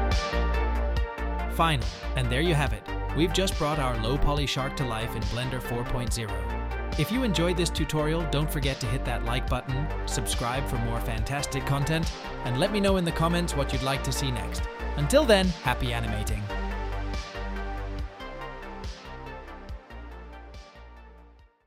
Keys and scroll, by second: 0.5 ctrl+s.